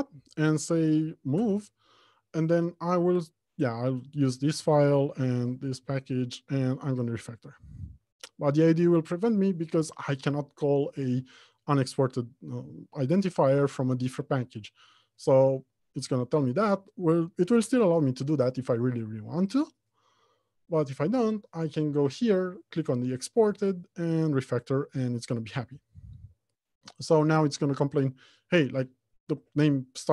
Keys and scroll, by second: 1.5 F6, 28.1 F2.